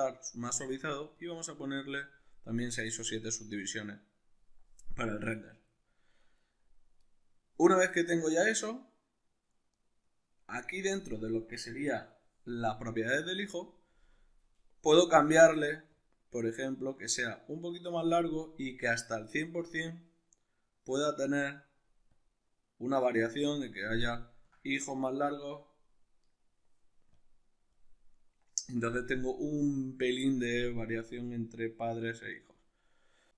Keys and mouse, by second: 1.2-5.8 drag, 5.8-15.9 shift+middle drag, 15.9-24.2 drag, 24.2-27.2 ctrl+middle drag, 27.2-33.3 drag.